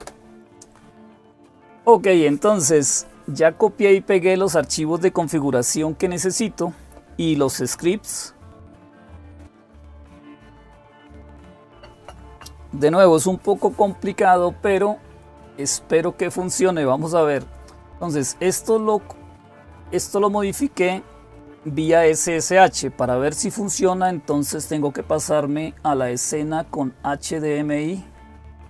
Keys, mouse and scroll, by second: 18.5-19.6 drag, 28.5 click.